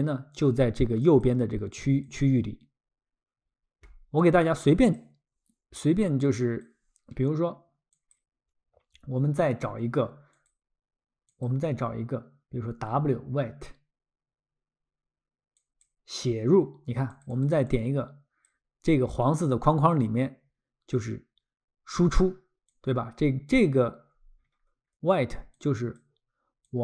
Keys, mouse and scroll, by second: 1.0 click, 4.2 click, 4.8 click, 8.0 click, 10.4 click, 15.6 click, 17.1 click, 17.4 click, 17.7 click, 22.7 click, 24.0-24.4 scroll, 25.6 click, 26.6 click.